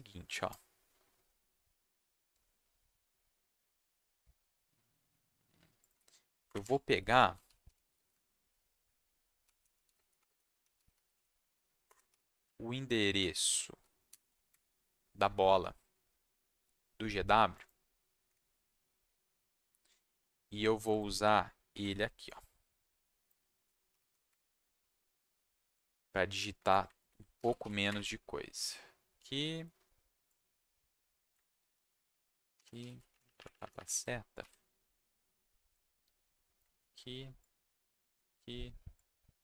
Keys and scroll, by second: 6.4 Return, 6.6 Tab, 7.2-12.1 typing, 11.8 Return, 12.4 Left, 14.1 shift+7, 14.5 Escape, 21.7 ctrl+c, 23.5 ctrl+v, 23.9 -, 24.1 shift+., 24.3 Escape, 27.1 ctrl+v, 27.3 -, 27.6 shift+., 27.9 Escape, 31.6 ctrl+v, 32.5 -, 32.8 shift+., 33.1 shift+Left, 33.2 shift+Left, 33.3 shift+Left, 33.5 shift+Left, 33.6 shift+Left, 33.7 shift+Left, 34.4 ctrl+c, 36.7 ctrl+v, 38.2 ctrl+v.